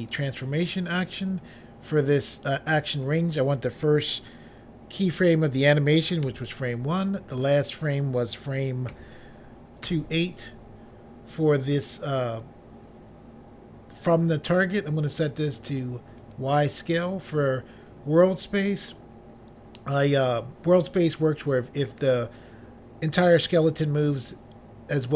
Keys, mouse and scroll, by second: 0.1 click, 0.3 click, 3.0 click, 3.1 click, 6.3 1, 7.4 click, 7.6 click, 9.0 2, 9.9 8, 14.6 click, 16.3 click, 16.4 click.